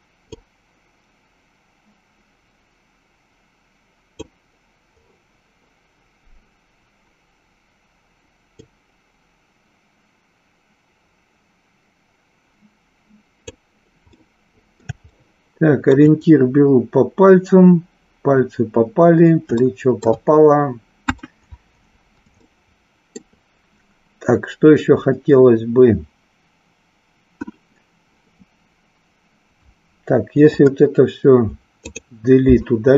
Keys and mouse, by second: 0.3-4.3 drag, 8.7-13.5 drag, 14.2 middle click, 15.2 shift+middle click, 19.7 shift+middle click, 21.1 KP_1, 22.5 shift+middle click, 30.4 Delete.